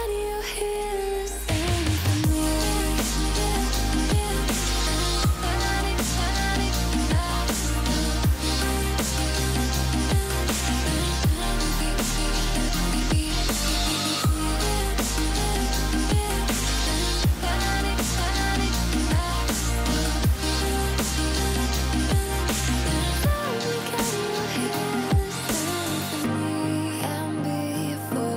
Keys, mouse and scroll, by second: 0.5-0.8 alt+scroll up 1, 1.4-2.9 alt+shift+drag, 6.9 right click, 10.1 click, 14.4 shift+click, 15.5 right click, 17.1 click, 19.3-19.7 alt+scroll up 1, 20.3-24.0 drag, 24.3-25.2 alt+scroll down 2, 25.2 alt+scroll up 2, 25.5-26.5 alt+shift+drag.